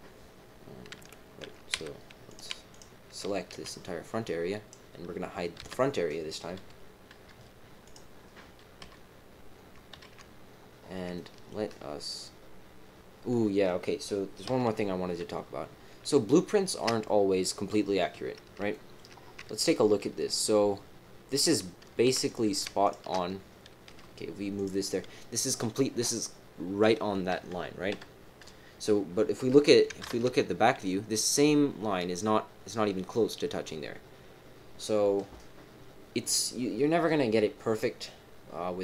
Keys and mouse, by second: 1.7 z, 2.7 click, 3.5 b, 5.6 h, 7.1 KP_3, 7.8 click, 8.6 KP_3, 8.8 KP_1, 9.9 ctrl+KP_1, 11.1 shift+middle click, 14.4 KP_1, 15.0 KP_3, 16.2 shift+middle click, 18.7 shift+click, 19.6 shift+middle click, 21.4 click, 22.2 click, 22.8 alt+shift+click, 23.9 g, 27.9 KP_3, 30.0 ctrl+KP_1.